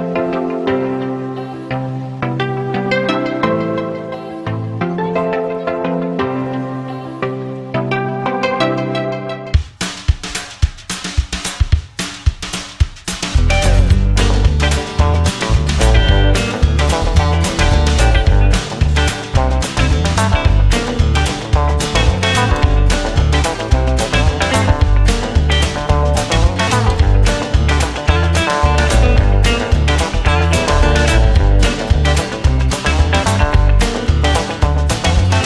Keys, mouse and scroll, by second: 0.3 right click, 1.7 space, 1.9 space, 4.3 space, 4.6 space, 5.2 space, 6.8 space, 7.6 space, 8.1 space, 9.9 right click, 10.8 right click, 12.7 right click, 12.9 right click, 15.0 right click, 15.5 right click, 16.6 right click, 17.1 right click, 17.3 right click, 19.1 right click, 20.1 right click, 20.5 right click, 22.3 right click, 22.8 right click, 23.3 right click, 23.7 right click, 24.0 right click, 24.4 right click, 25.4 right click, 26.2 right click, 26.8 right click, 27.5 right click, 27.9 right click, 28.4 space, 28.6 space, 29.9 space, 30.9 right click, 31.4 drag, 34.3 click, 34.5 space.